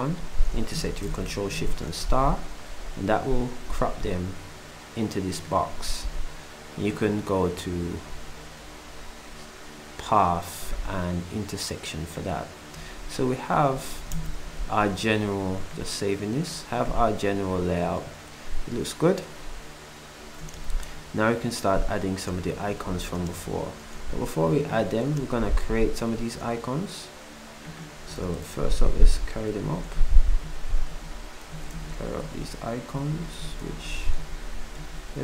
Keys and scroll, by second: 1.2 8, 25.1 ctrl+shift+s, 28.6 ctrl+Down, 30.0 ctrl+alt+Up, 30.4 ctrl+alt+Up, 30.6 Down, 30.9-32.9 typing, 33.4 Up, 34.2 Up, 34.4 Up.